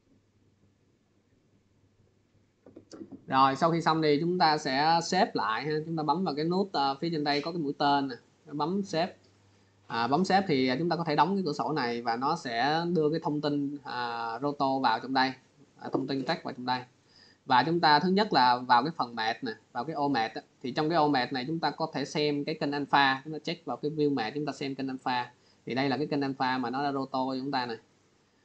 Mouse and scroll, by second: 8.4 click, 10.3 click, 15.8 click, 19.0 click, 22.2 click, 28.1 click.